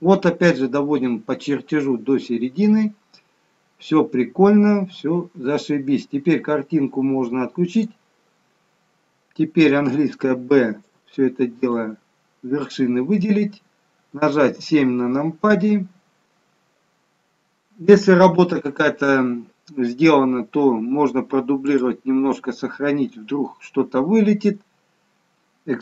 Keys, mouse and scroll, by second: 2.4-3.4 scroll down 1, 3.4-4.4 scroll down 2, 7.7 click, 10.0 b, 14.4 KP_7, 21.6 click.